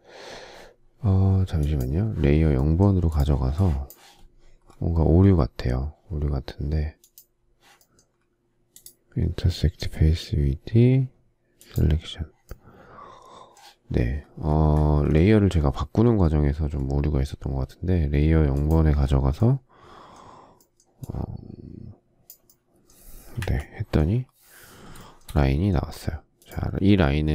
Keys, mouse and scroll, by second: 23.4 Delete, 24.9 shift+middle click.